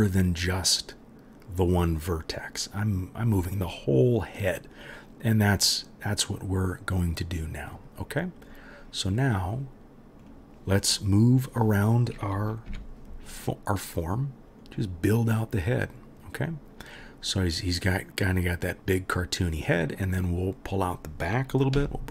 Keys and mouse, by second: 12.7 g, 15.5 click, 15.5 middle click, 16.4-21.7 drag, 21.7 g.